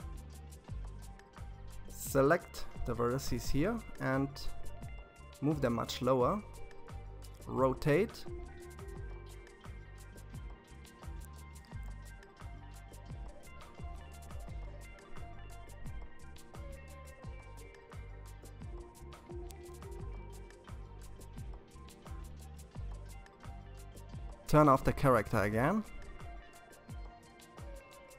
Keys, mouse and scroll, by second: 0.0 c, 3.3 g, 6.3 r, 9.9 g, 13.8-14.4 scroll down 3, 14.8-17.9 middle drag, 19.1 click, 22.5 click, 24.0-27.1 middle drag, 27.3-28.1 scroll up 2.